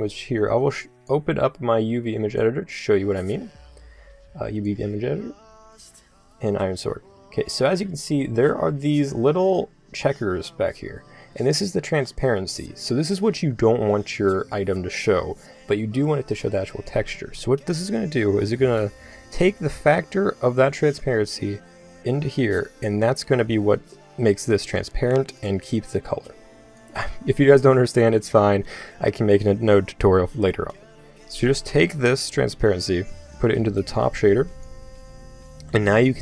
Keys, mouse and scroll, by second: 2.6-4.7 drag, 5.0 middle click, 7.7-9.0 scroll up 1, 9.0-11.0 scroll up 1, 11.0-16.1 middle drag, 18.1 middle click, 20.5-24.4 middle drag, 24.4-29.1 drag, 32.2-34.7 drag.